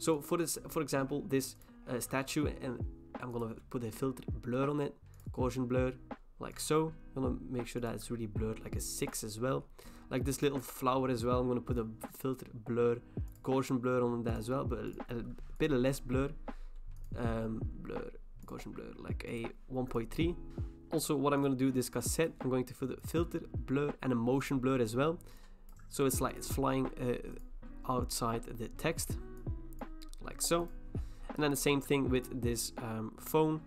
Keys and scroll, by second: 20.5 ctrl+t, 20.5 Return.